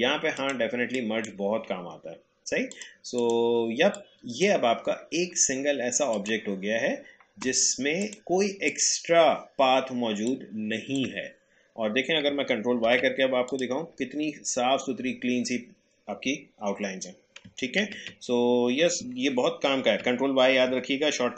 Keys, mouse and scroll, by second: 0.4 click, 0.6 space, 1.0 click, 1.1 space, 2.7-12.8 drag, 12.8 ctrl+y, 13.4 click, 14.2-14.6 alt+scroll up 1, 17.8 ctrl+z.